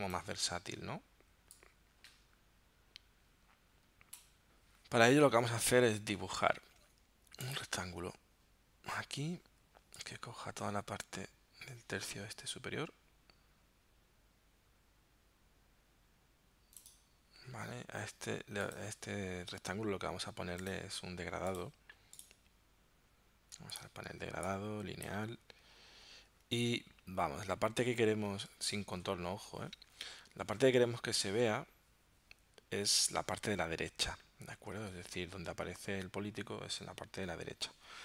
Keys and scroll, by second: 34.8 super+Tab.